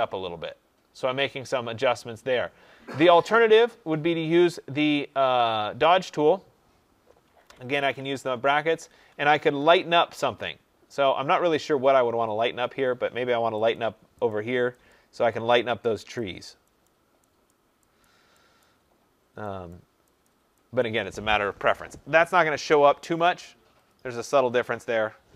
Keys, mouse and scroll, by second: 5.7 click, 7.2-9.4 typing, 12.0 [, 12.4 [, 12.7 [, 13.7 click, 14.2 click, 14.8 click, 15.4 click, 16.1 click, 16.8 click, 17.4 click, 17.9 click, 18.5 click, 19.6 click, 20.1 click, 20.7 click, 23.1 click, 23.8 click, 24.6 click.